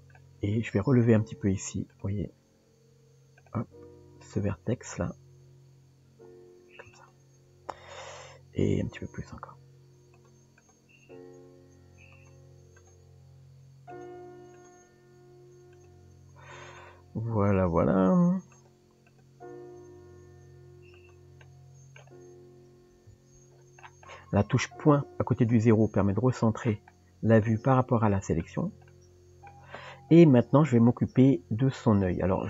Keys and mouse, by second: 1.3 Tab, 1.9 click, 4.2 click, 10.6 click, 12.8 click, 14.6 click, 16.8 click, 17.6 click, 19.1 click, 21.4 middle click, 23.1 KP_Decimal, 27.4-28.4 middle drag, 28.9 middle click.